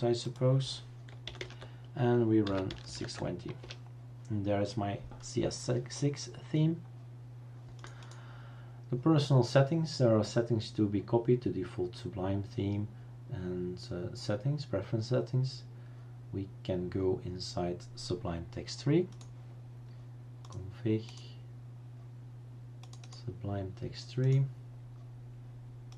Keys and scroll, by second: 1.4-3.4 typing, 3.6 Return.